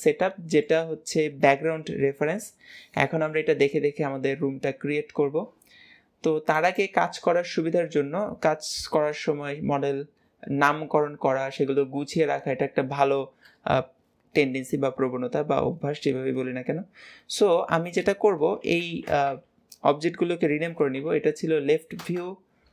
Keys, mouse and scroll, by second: 6.6-9.6 drag.